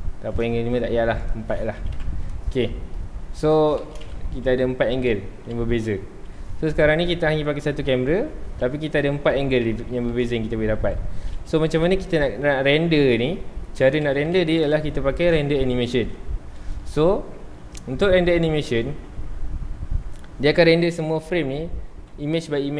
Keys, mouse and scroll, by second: 1.2 click, 2.0 KP_Enter, 4.0 shift+Right, 4.9 Left, 7.0 ctrl+s, 7.1-7.4 scroll down 2, 7.4-9.0 middle drag, 9.0 Right, 10.7 Left, 14.2 Right, 16.6 click.